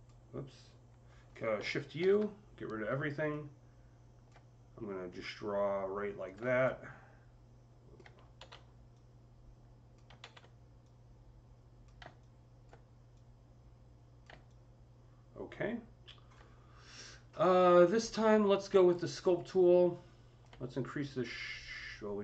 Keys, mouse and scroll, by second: 1.8 shift+u, 3.1-12.5 alt+drag, 6.1 right click, 8.2 ctrl+z, 12.5 ctrl+alt+click, 13.0-14.3 ctrl+alt+drag, 14.4-18.8 ctrl+alt+drag, 19.0 ctrl+alt+click, 19.0 c, 19.1 ctrl+click, 19.7-22.2 alt+drag, 20.1 typing.